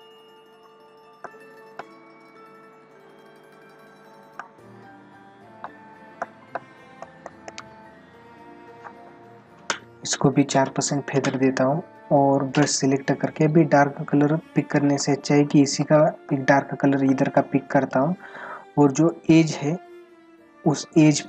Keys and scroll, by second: 14.0 ctrl+-, 15.0 space, 17.6 ctrl+-, 18.5 ], 20.3 ].